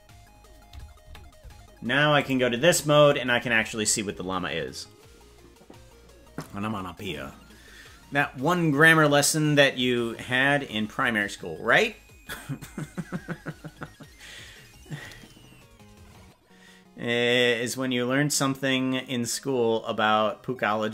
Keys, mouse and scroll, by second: 1.1 KP_Decimal, 2.2 click, 2.7-3.1 scroll down 3.